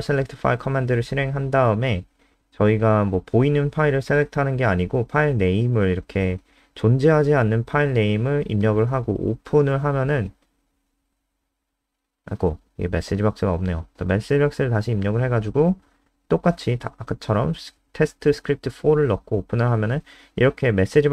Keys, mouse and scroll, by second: 3.9-6.9 typing, 9.5 Return, 11.6 Left, 11.7 Left, 16.5-19.1 typing.